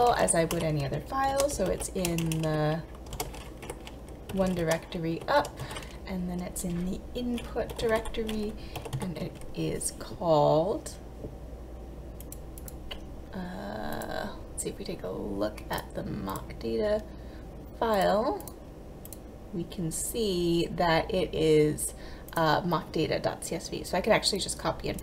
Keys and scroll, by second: 1.4 shift+', 1.6 ., 1.8 /, 2.1 BackSpace, 3.2 shift+', 3.7 Left, 4.4 ., 4.7 shift+/, 5.2 BackSpace, 5.4 /, 5.7 Tab, 7.7-8.8 typing, 9.0 Tab.